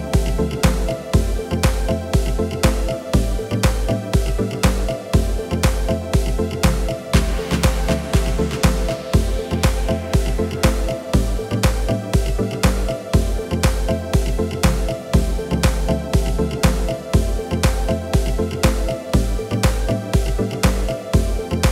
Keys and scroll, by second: 1.1 g, 5.7 KP_7, 7.8 s, 15.4 g, 17.6 Tab, 18.8 ctrl+b.